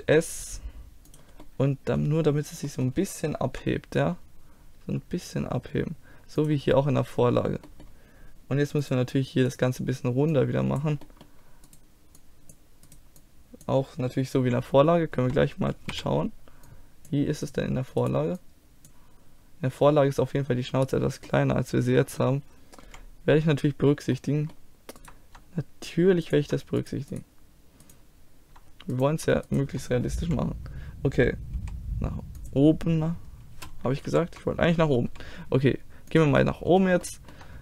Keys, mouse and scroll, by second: 1.4-3.5 middle drag, 3.5 KP_1, 4.8 g, 6.7-8.8 middle drag, 8.8-10.8 drag, 9.5-10.8 right drag, 11.0-12.8 drag, 11.0-12.8 middle drag, 11.0-12.8 right drag, 13.6 click, 13.6 right click, 14.4 KP_1, 14.6 middle click, 14.7 click, 15.9 z, 16.7-18.1 drag, 17.4 right click, 19.8-21.3 drag, 21.3-22.9 middle drag, 22.9 KP_1, 24.1-26.2 middle drag, 26.2-30.2 drag, 26.2-28.8 right drag, 30.2 KP_1, 31.6 r, 34.1 ctrl+z, 35.1 g, 36.4-37.6 middle drag.